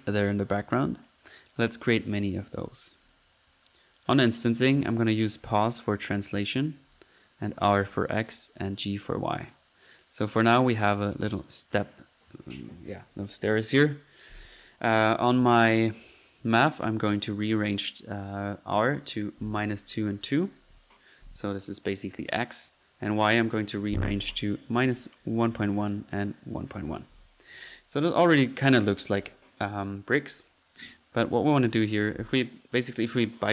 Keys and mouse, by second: 3.0 click, 4.9-6.0 drag, 6.9 click, 7.8 click, 8.2 click, 8.8 click, 10.9 click, 16.4 click, 17.4 click, 18.4 click, 18.9 click, 22.6 click, 25.7 typing, 28.1 click, 29.8 middle click, 30.3-30.8 drag, 30.9 click, 31.9 click.